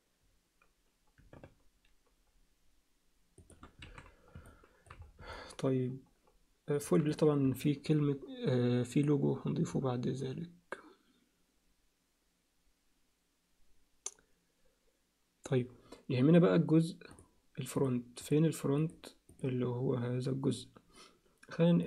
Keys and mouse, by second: 3.8 alt+a, 4.5 alt+middle click, 5.3-6.8 alt+middle drag, 7.7 alt+middle click.